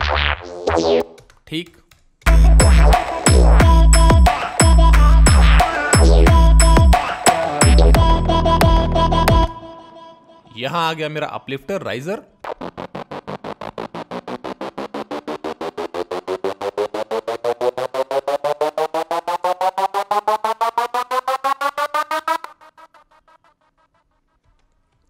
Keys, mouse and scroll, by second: 11.6 click, 11.9 right click, 19.0 F1, 19.0 right click, 22.9 F1, 23.1 F1.